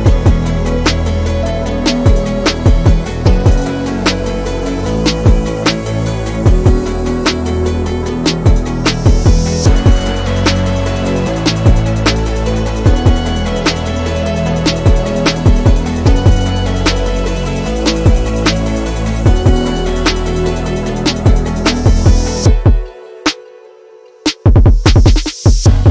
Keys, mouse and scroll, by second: 0.1 s, 1.6 middle click, 2.6 KP_7, 3.3 shift+middle click, 3.4-3.8 scroll up 6, 3.9-5.9 middle drag, 6.6-9.3 middle drag, 9.5 scroll down 4, 9.8 middle click, 10.1 click, 10.3 middle click, 10.5-10.8 scroll up 1, 10.8-12.0 middle drag, 12.0 scroll up 1, 12.2-12.6 scroll down 6, 12.6-13.1 middle drag, 13.1 click, 13.4 scroll up 1, 13.7 Tab, 13.9 middle click, 14.4 scroll up 1, 15.1 click, 15.9 alt+click, 16.4 alt+click, 17.3 1, 17.6 alt+click, 18.2 f, 19.0 alt+click, 19.6 f, 20.3 3, 21.1 click, 21.6 shift+click, 22.1 click, 23.1 Tab, 23.3 drag, 23.5 scroll down 1, 23.7 middle click, 24.6 scroll down 1, 24.8-25.7 middle drag, 25.7 KP_3.